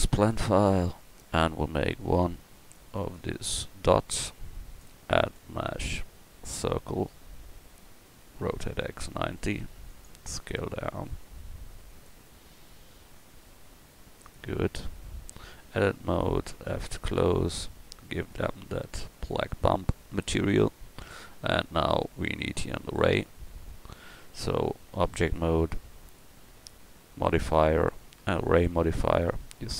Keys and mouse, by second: 1.3-4.7 drag, 8.4 r, 10.3 s, 12.3 s, 15.5 Tab, 16.7 f, 21.5-24.4 middle drag, 24.4 Tab, 27.6-29.7 drag.